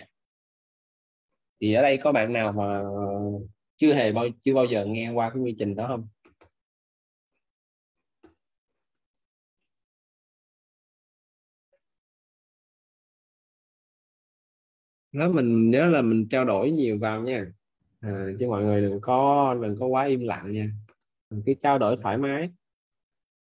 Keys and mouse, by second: 1.2 alt+click, 18.0 click, 22.3 click.